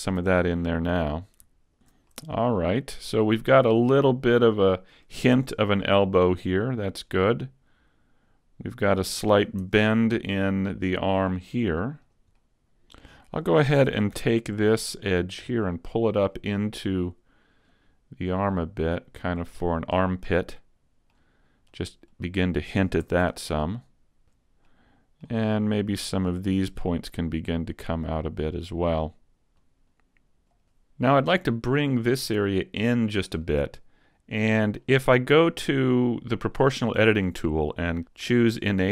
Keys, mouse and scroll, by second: 1.2 right click, 1.8 shift+right click, 1.8 a, 2.1 middle click, 4.6 middle click, 5.4 Tab, 5.8 middle click, 7.4 middle click, 9.6 Tab, 10.4 middle click, 12.1 right click, 12.4 middle click, 12.8 scroll up 2, 13.9 ctrl+Tab, 14.8 right click, 15.2 middle click, 17.0 click, 18.6 click, 19.7-20.2 scroll down 1, 20.2 middle click, 21.8 click, 23.1 a, 23.3 Tab, 23.4 scroll down 2, 23.8 middle click, 24.4 Tab, 24.4 scroll up 2, 24.7 middle click, 26.3 right click, 27.4 click, 28.9 right click, 29.6 click, 30.8 middle click, 32.0 right click, 33.5 middle click, 36.6 click.